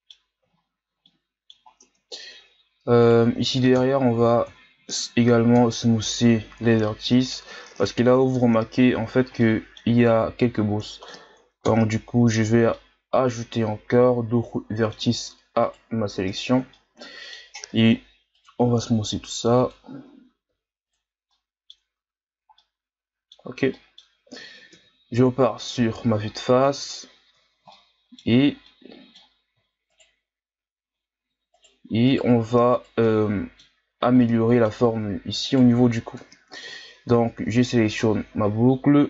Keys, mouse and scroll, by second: 0.5-1.0 scroll up 7, 1.0-1.8 middle drag, 1.8 Tab, 3.0 right click, 3.8 ctrl+KP_Add, 4.2 ctrl+KP_Add, 4.5 ctrl+KP_Add, 5.6 ctrl+KP_Add, 6.6 scroll down 1, 6.8-9.0 middle drag, 9.0-9.4 ctrl+scroll up 2, 9.4 middle click, 10.1-10.8 scroll up 1, 10.8 middle click, 11.6 ctrl+KP_Add, 12.7-15.6 middle drag, 15.6 shift+right click, 16.3 shift+right click, 16.8 middle click, 17.6 w, 19.1 w, 21.3 middle click, 21.9 Tab, 22.6-24.8 middle drag, 24.8 KP_1, 25.4-25.8 shift+scroll down 2, 25.8-26.7 ctrl+scroll up 8, 26.7 Tab, 27.7-29.9 middle drag, 29.9 shift+right click, 31.5 right click, 32.1 alt+right click, 32.7 shift+right click, 33.0-34.0 scroll up 1, 34.0 scroll down 1, 34.2-35.4 middle drag, 35.4 shift+right click, 36.2 KP_1, 37.7-39.0 drag.